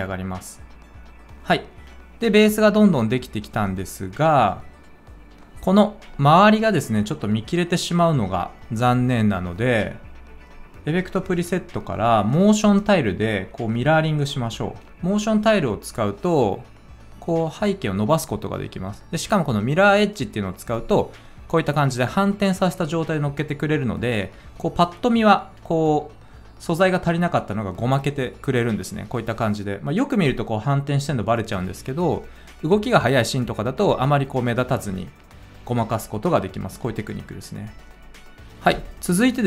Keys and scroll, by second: 14.8 Return, 14.8 typing, 36.8 space.